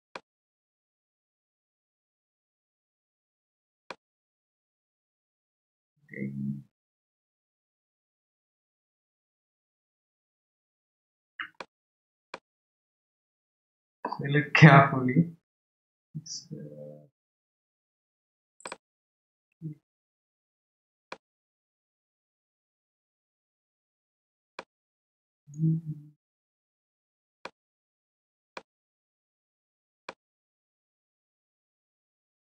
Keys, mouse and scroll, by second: 0.1 click, 5.6 scroll down 1, 13.3-14.6 shift+middle drag, 18.6 click, 21.1 click, 27.4 click, 30.0 click.